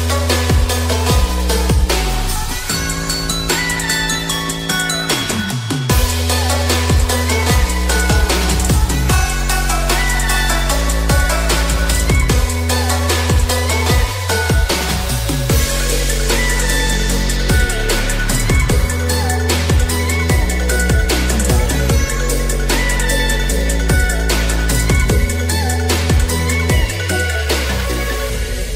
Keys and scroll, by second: 10.9-11.7 typing.